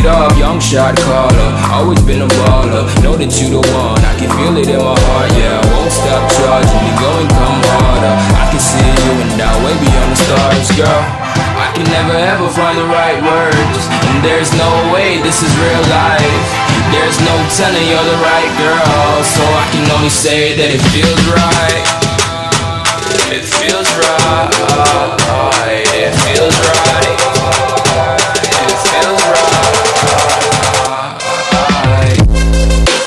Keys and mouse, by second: 1.6-4.6 drag, 7.1 click, 10.1 Up, 11.7 click, 17.8 right click, 18.7 click, 22.5 click, 22.9 Right, 25.5-26.2 click, 26.8-27.7 space, 28.3 ctrl+-, 28.6 space, 28.7 click, 28.9 space, 30.1 click, 31.2-32.0 alt+drag.